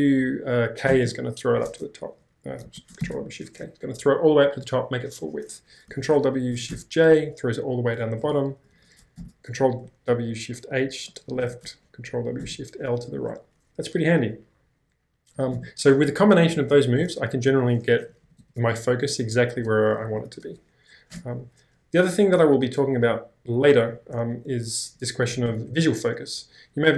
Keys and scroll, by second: 0.9 k, 2.7 ctrl+w, 3.0 shift+k, 6.0 ctrl+w, 6.7 shift+j, 8.7 ctrl+w, 9.1 shift+h, 11.4 ctrl+w, 12.4 shift+l, 15.5 space, 15.6 o, 17.6-20.9 typing, 21.2 Return, 22.2-22.9 typing, 24.9-26.0 typing.